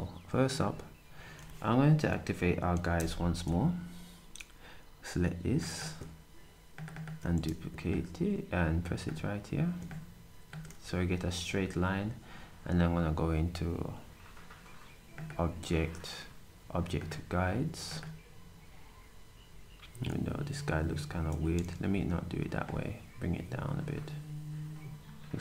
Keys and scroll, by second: 7.7 typing.